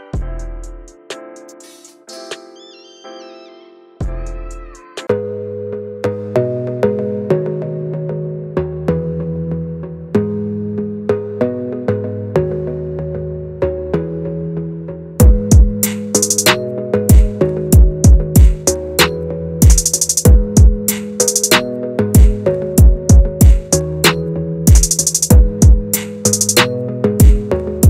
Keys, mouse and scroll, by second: 0.4-0.9 scroll down 2, 0.9-1.6 scroll up 1, 1.6-1.9 scroll down 2, 2.3 shift+right click, 2.4 shift+a, 3.5 s, 5.2 scroll up 4, 5.4 shift+middle click, 5.6 s, 6.4 Tab, 6.5 1, 6.8 f, 8.6 e, 8.9 s, 21.4 scroll up 1, 21.6 shift+middle click, 22.1 click, 22.8 g, 24.8 Tab, 25.8-27.8 drag.